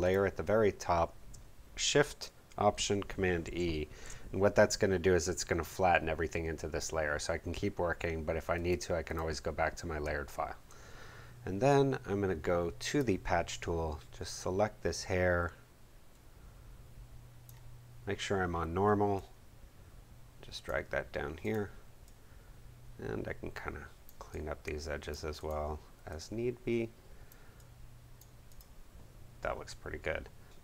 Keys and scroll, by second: 3.4 alt+shift+super+e.